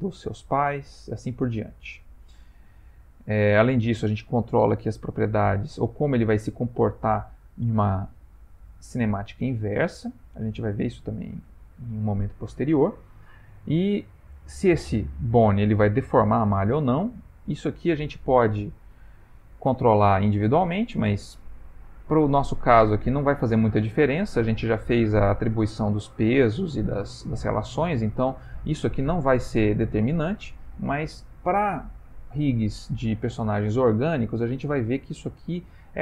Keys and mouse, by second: 2.4 click, 3.7 click, 9.5 click, 21.0 middle click.